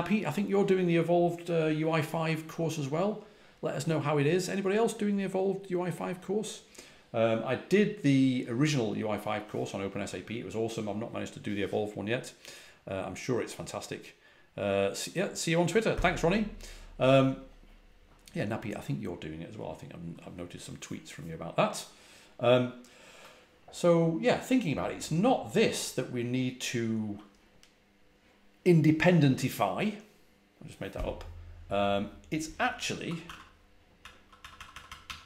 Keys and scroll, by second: 25.6-26.3 typing, 32.9-35.2 typing.